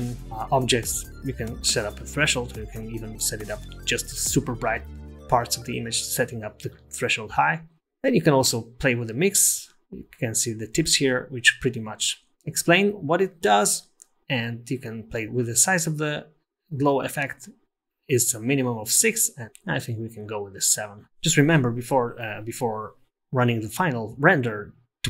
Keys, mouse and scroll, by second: 7.5-7.8 scroll down 5, 7.8 scroll up 10, 15.9 click, 19.4 click.